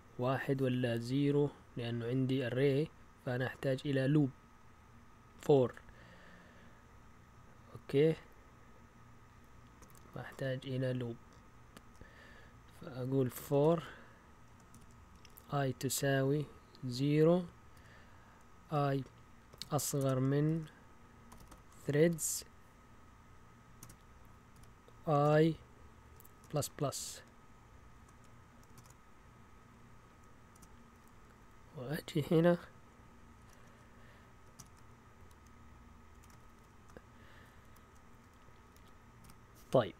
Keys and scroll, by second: 5.4 Up, 9.8 Right, 10.1 typing, 11.8 typing, 13.5-26.5 typing, 27.7-29.2 typing, 30.5 Delete, 30.9-31.7 typing, 33.4-35.1 typing, 36.1 Escape, 36.3 typing, 37.6 End, 38.1 a, 38.3 Left, 38.7 Left, 39.2 space.